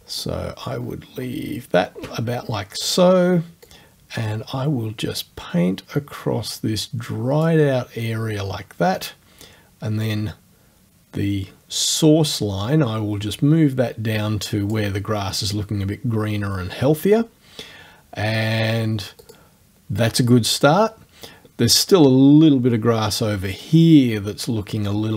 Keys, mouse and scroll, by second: 0.1-1.1 shift+scroll down 4, 1.5 shift+scroll down 2, 1.7-3.7 shift+middle drag, 3.7-7.6 drag, 10.1-11.6 drag, 12.4 click, 19.3 click.